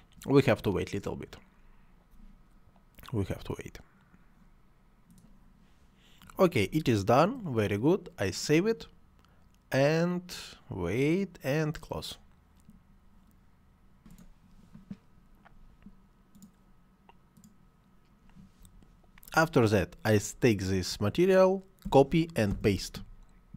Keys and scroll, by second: 21.9 ctrl+c, 22.5 ctrl+v.